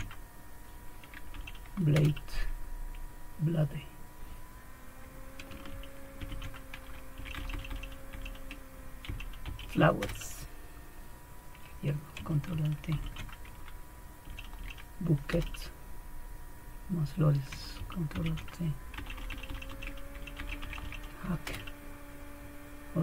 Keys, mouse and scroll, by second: 1.3 Down, 1.9 Return, 6.2 ctrl+alt+t, 7.1 Down, 7.3 Down, 7.5 Down, 7.7 Down, 8.1 Down, 9.1-9.8 Down, 9.4 Up, 10.0 Return, 12.9 ctrl+alt+t, 14.2 Down, 14.6 Down, 15.3 Return, 18.2 ctrl+alt+t, 18.9 Down, 19.2 Down, 19.3 Down, 19.3-20.4 typing, 20.4 Down, 20.7 Down, 20.9 Down, 21.5 Return.